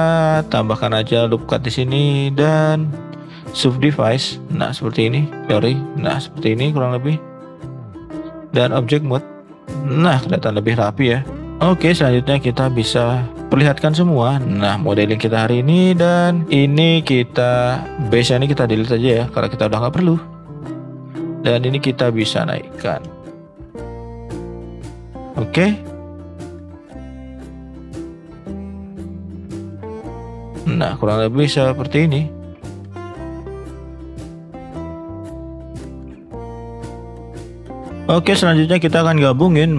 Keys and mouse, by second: 0.7-1.1 shift+drag, 1.4 shift+click, 2.2 right click, 5.0 click, 5.4 ctrl+z, 5.4 g, 7.7-8.3 drag, 8.6 middle click, 9.2 middle drag, 10.7 middle drag, 11.3 middle click, 12.0 middle click, 13.8 alt+h, 14.4-15.3 middle drag, 15.7 middle drag, 16.4 middle click, 19.2 Delete, 19.7-20.0 middle drag, 20.7 click, 21.0 middle click, 21.6 click, 22.7 middle drag, 23.1 shift+middle click, 23.5 middle click, 24.1 shift+middle click, 25.2 shift+middle drag, 27.3-31.5 drag, 31.8 middle click, 32.5 shift+middle click, 33.2 shift+middle click, 33.6 middle click, 34.4 middle drag, 35.0 click, 35.6 middle click, 35.9 middle click, 36.4 middle click, 36.8 middle drag, 37.4 middle click, 37.8 middle click, 37.9 ctrl+z.